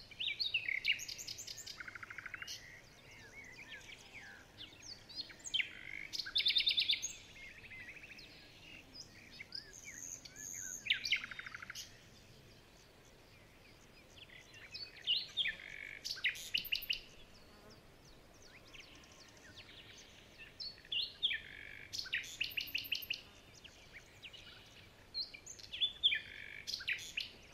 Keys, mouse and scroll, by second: 0.9 alt+scroll up 2, 1.6 alt+scroll down 2, 1.8 alt+scroll up 1, 2.9 alt+scroll down 2, 3.1 alt+scroll up 2, 3.3 alt+scroll down 1, 3.5 alt+scroll up 1, 5.5 shift+click, 5.7 alt+scroll up 4, 6.5-7.0 alt+scroll up 2, 7.1 alt+scroll down 3, 7.4-7.8 alt+scroll up 6, 9.1-9.6 alt+scroll down 8, 9.6-10.3 alt+scroll up 7, 12.3-12.7 alt+scroll down 2, 12.7-14.1 alt+scroll up 9, 16.2-16.7 alt+scroll down 10, 17.2 alt+scroll down 2, 17.8-18.2 alt+scroll up 4, 19.2-19.7 alt+scroll down 6, 19.7-20.0 alt+scroll up 2, 20.0 alt+scroll down 2, 20.3-20.8 alt+scroll up 2, 20.8 alt+scroll down 2.